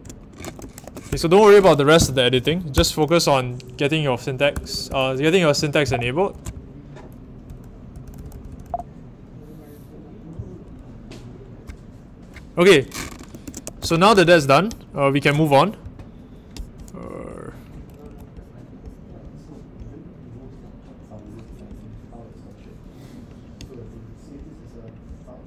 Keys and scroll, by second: 0.4 g, 0.8 shift+1, 1.0 Return, 2.3 Up, 2.4 Up, 2.7 Return, 4.5-8.6 typing, 13.1-14.1 typing.